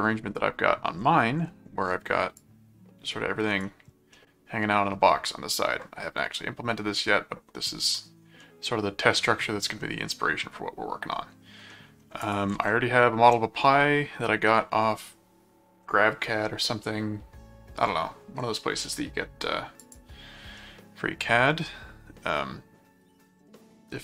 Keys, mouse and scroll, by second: 2.4 click, 4.1-5.5 middle drag, 8.4 middle click, 9.8-11.1 middle drag, 11.7 middle click, 12.2 ctrl+click, 12.6 ctrl+Tab, 18.8 click, 19.8 click, 20.6 middle click, 21.6-24.0 middle drag.